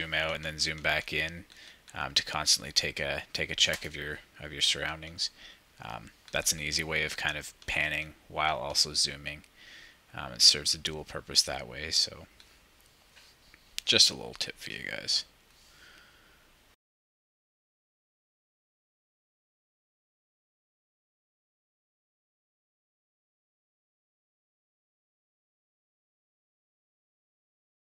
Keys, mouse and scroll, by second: 0.2 shift+=, 1.4 -, 2.4 shift+=, 4.9 shift+=, 6.2 -, 7.6 shift+=, 8.5-10.4 ctrl+drag, 12.4 -, 13.7 ctrl+click.